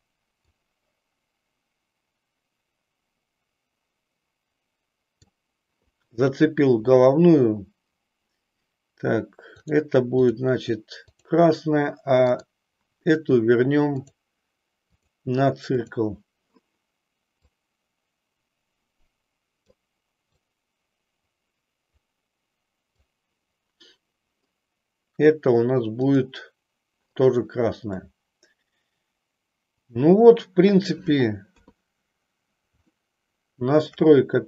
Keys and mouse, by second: 0.9-5.3 drag, 12.3 click, 14.0-15.2 drag, 15.9 click, 17.4-19.8 drag, 20.3-23.3 drag, 26.1 click, 28.1-30.7 middle drag, 31.5 KP_3, 32.8-33.9 shift+middle drag.